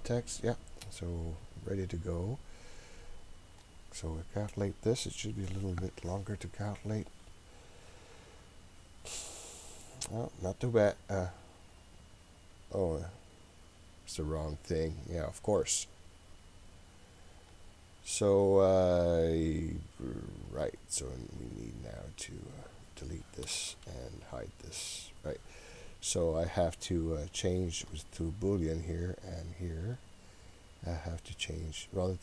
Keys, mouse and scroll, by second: 3.7-9.1 drag, 17.5-20.9 drag, 23.1 click, 23.7 Delete, 24.8 click, 26.3-28.1 drag, 29.3 click, 30.3 click.